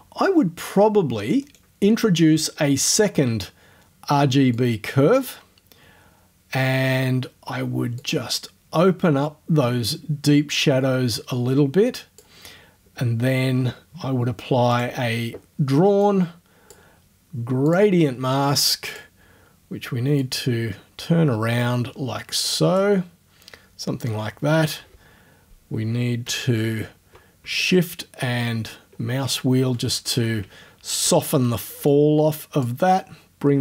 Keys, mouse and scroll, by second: 1.4 click, 4.6 click, 8.0-12.4 drag, 13.2 scroll down 2, 13.4-14.5 middle drag, 14.8 click, 16.0 click, 17.7 click, 18.9 click, 19.1 middle click, 20.2-23.0 drag, 27.9 shift+scroll up 2, 28.0-29.4 shift+scroll down 6, 30.6 shift+scroll down 1, 31.9 click.